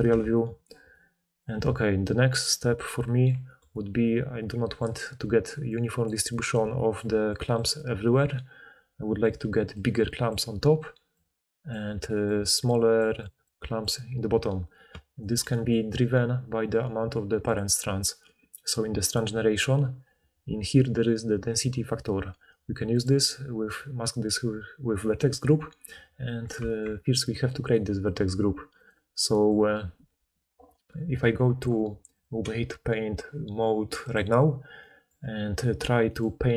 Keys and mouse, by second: 0.0 alt+a, 5.1-8.0 typing, 5.5-8.9 drag, 5.6-8.9 right drag, 9.3-13.8 typing, 15.2 d, 15.8-17.5 middle drag, 17.5-19.1 drag, 19.1 middle drag, 19.2-23.0 drag, 23.0-27.6 middle drag, 27.6-34.3 drag.